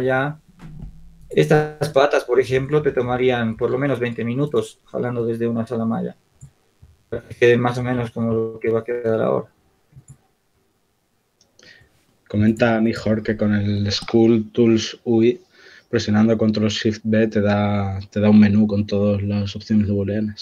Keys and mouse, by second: 0.1 r, 1.9 shift+d, 6.5 click, 7.0 shift+d, 11.5-12.6 drag, 12.6-14.9 right drag, 14.9-15.9 middle drag, 16.6-18.2 drag, 17.6 r, 20.3 right click.